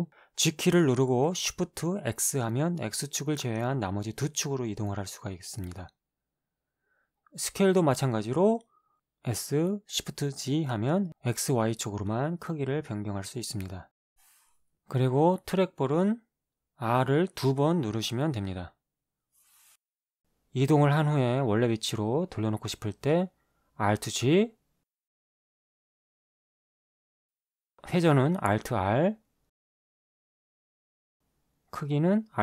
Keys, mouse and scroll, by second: 1.1 shift+x, 3.7 right click, 3.9 g, 4.9 shift+z, 6.3-7.6 right drag, 7.6 s, 8.8 shift+z, 13.3 click, 14.4 r, 14.8 r, 20.5 click, 22.6 g, 23.1 click, 24.7 alt+g, 30.1 alt+r, 32.1 alt+s.